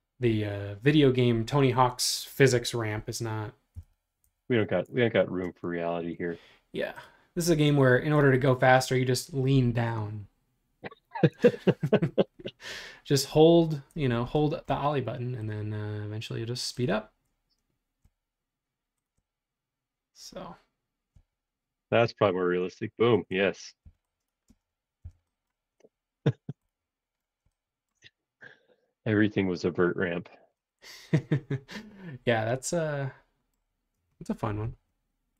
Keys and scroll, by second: 3.5-5.4 typing, 23.8 e, 24.4 space, 25.0 p, 29.7 space.